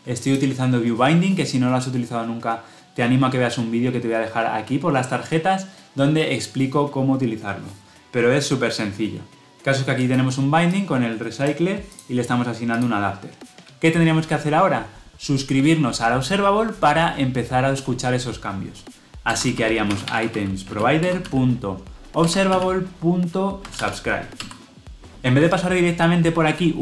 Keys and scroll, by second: 20.9 Return.